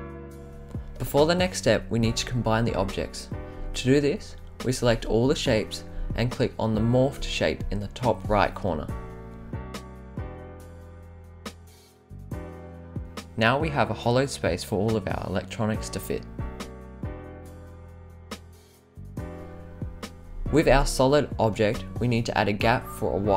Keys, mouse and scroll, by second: 1.5-2.7 right drag, 4.0-6.2 drag, 8.4 click, 9.4 click, 12.6-13.4 right drag, 15.1-20.6 right drag, 21.3-21.6 scroll down 5, 21.9 scroll up 1, 22.0 scroll down 1, 23.0 click.